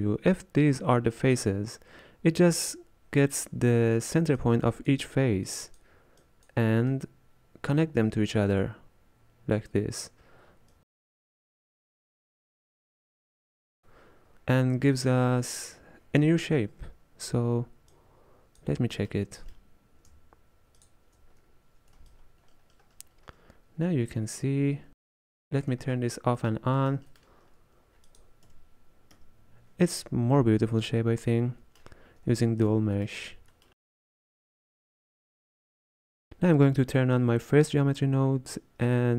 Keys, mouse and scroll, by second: 4.4-10.0 drag, 10.8-18.7 drag, 20.8 alt+shift+click, 22.1-25.2 ctrl+drag, 25.9-26.4 scroll down 1, 26.4-28.1 middle drag, 28.1 click, 28.5 m, 29.2 m, 30.0-34.6 middle drag, 34.6-39.1 ctrl+drag.